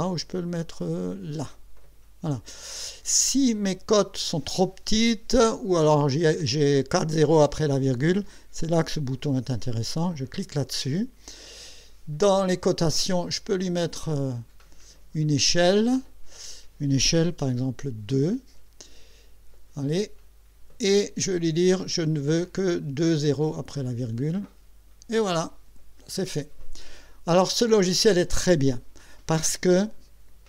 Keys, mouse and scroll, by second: 1.8 click, 10.0 click, 14.0 click, 18.1 KP_2, 21.9 click, 23.2 click, 24.4 click.